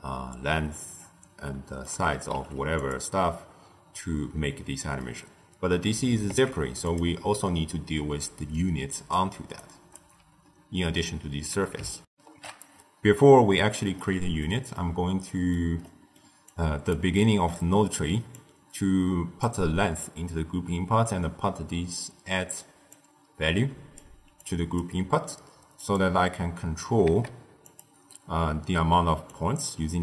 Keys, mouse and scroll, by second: 2.3 q, 4.9-6.2 middle drag, 6.2 z, 8.4 d, 8.4-9.0 drag, 9.0-9.4 d, 9.5 right click, 9.9 d, 10.0 d, 12.0 ctrl+alt+shift+q, 13.9-16.4 middle drag, 16.4 click, 17.1-18.2 middle drag, 18.2 click, 21.9 click, 22.8 drag, 24.3 click, 25.7 click, 26.9 z, 29.2-30.0 drag.